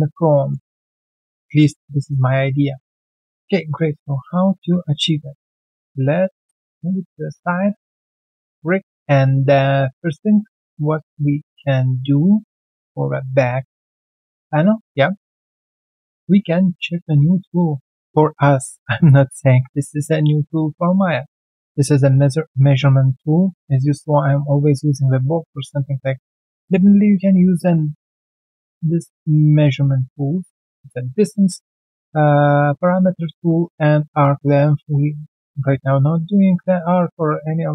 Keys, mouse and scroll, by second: 0.4 alt+right click, 0.7 alt+middle click, 1.1 alt+click, 1.8 alt+middle click, 2.0 alt+scroll down 1, 2.1 w, 4.5 typing, 4.5 ctrl+d, 5.5 alt+middle click, 6.1 alt+middle click, 6.7 alt+click, 7.9 alt+middle click, 8.2 alt+click, 8.5 alt+middle click, 8.8 alt+right click, 9.1 alt+click, 9.5 alt+middle click, 9.7 alt+right click, 10.9 alt+click, 11.2 alt+middle click, 11.4 alt+right click, 11.7 alt+middle click, 13.0 ctrl+1, 13.2 alt+click, 13.5 alt+middle click, 14.1 alt+click, 15.0 alt+middle click.